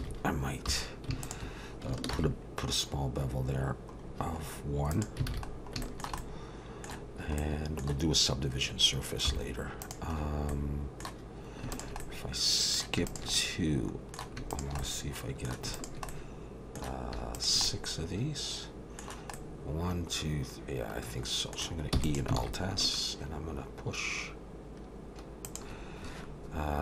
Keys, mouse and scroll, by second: 0.0 alt+a, 0.7 2, 1.2 alt+shift+click, 2.1 ctrl+b, 5.3 alt+a, 5.5-5.8 scroll down 3, 5.8 shift+middle click, 6.2 middle click, 7.4 middle click, 9.3 3, 9.8 click, 10.2 scroll down 3, 11.7 shift+click, 12.0 middle click, 13.1 shift+click, 13.3 middle click, 14.5 shift+click, 14.8 middle click, 15.7 shift+click, 16.1 middle click, 17.3 shift+click, 17.6 middle click, 19.3 middle click, 21.9 e, 22.4 alt+s.